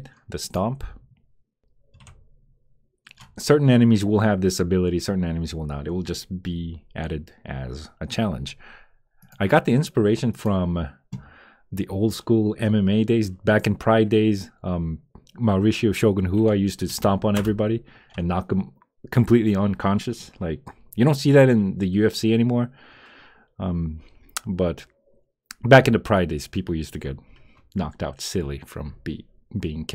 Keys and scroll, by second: 9.7 space, 17.3 Return.